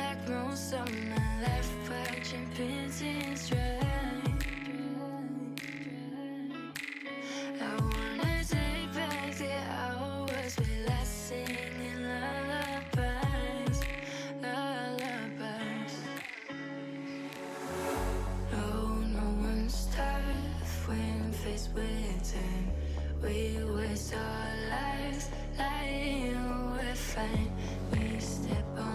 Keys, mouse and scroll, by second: 0.2-0.8 shift+r, 0.9 shift+r, 1.9-2.3 shift+middle drag, 2.3-3.2 shift+scroll down 1, 3.2 click, 3.6 shift+middle click, 4.3 g, 7.9-9.3 drag, 9.3 g, 14.2 click, 14.7 Tab, 14.8 click, 15.0 scroll down 4, 15.2-16.7 middle drag, 16.7 click, 17.0 Tab, 17.7-20.5 typing, 20.1 middle click, 21.2 click, 21.4-21.8 scroll down 2, 21.8-22.9 drag, 23.0-24.4 middle drag, 25.2 scroll down 1, 25.3 middle click, 26.1 click, 26.4-27.1 middle drag, 27.1 KP_1, 28.1 scroll up 4, 28.4 shift+a.